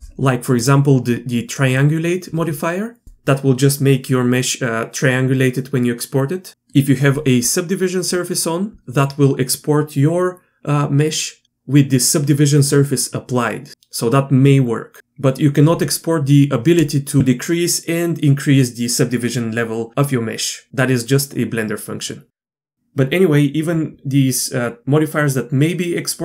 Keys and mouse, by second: 0.8-26.2 drag.